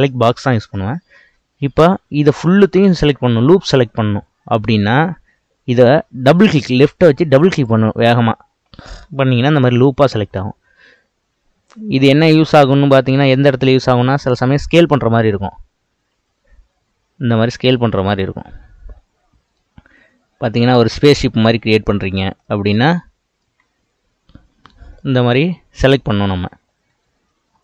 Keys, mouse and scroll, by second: 7.4 click, 7.6 click, 16.1 s, 22.5-23.6 middle drag, 23.6 Tab, 24.5 Tab, 25.0-26.1 middle drag, 26.1 ctrl+z, 26.5 ctrl+z.